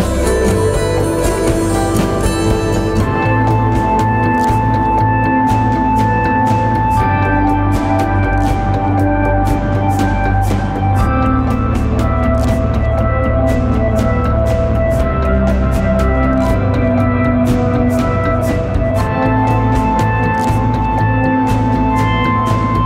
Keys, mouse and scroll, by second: 3.1 alt+BackSpace, 7.8 ctrl+click.